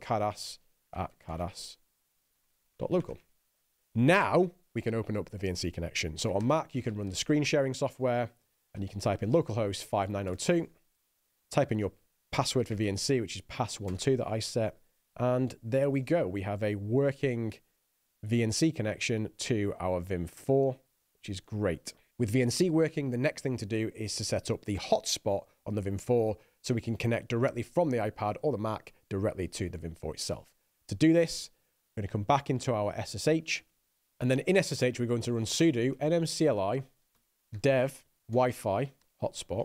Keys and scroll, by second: 0.0-4.1 typing, 6.8-9.7 typing, 10.7 Return, 35.4-39.6 typing.